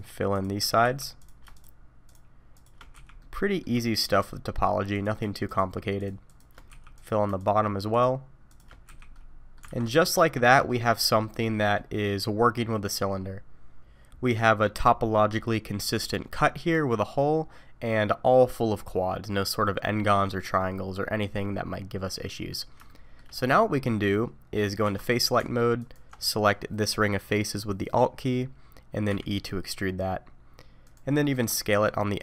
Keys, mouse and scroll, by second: 0.3 click, 0.8 f, 1.2 click, 1.5 shift+click, 2.0 shift+click, 2.5 shift+click, 2.9 f, 3.2 middle click, 3.8 shift+middle click, 4.3 middle click, 4.9 click, 5.4 shift+click, 6.0 shift+click, 6.5 click, 6.7 f, 7.0 click, 7.4 shift+click, 7.9 shift+click, 8.5 shift+click, 8.9 f, 9.1 middle click, 9.6 alt+a, 10.0 middle click, 11.4-12.1 scroll down 3, 11.8 middle click, 20.6 middle click, 22.9 shift+middle click, 24.8 3, 25.8 alt+click, 29.1 e, 31.2 middle click, 31.7 s.